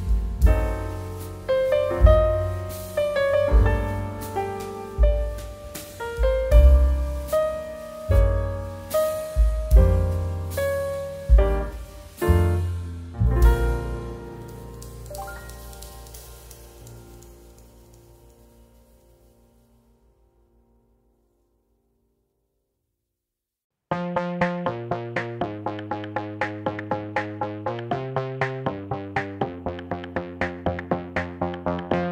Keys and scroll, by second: 2.0 space, 4.0 v, 5.4 z, 5.7 x, 9.6 z, 16.2 space, 21.9 space, 22.4 2, 26.0 ctrl+c, 26.0 ctrl+v.